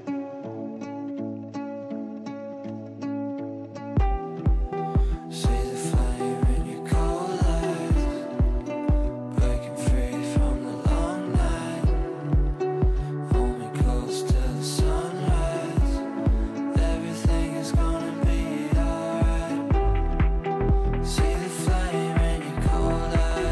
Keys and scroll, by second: 11.8 Delete, 21.8 g.